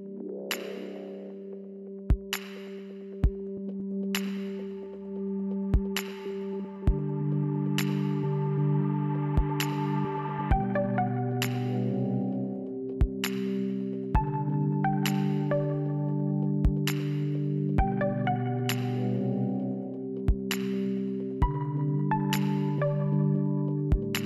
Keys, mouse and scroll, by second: 0.4 middle click, 0.9 middle click, 1.3 click, 2.4 middle click, 7.8 click, 10.7 click.